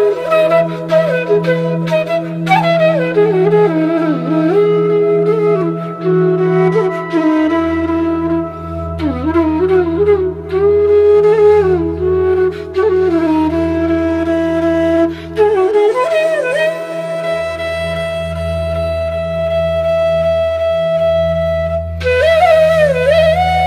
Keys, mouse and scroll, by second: 1.5-6.6 drag, 9.1-22.5 drag.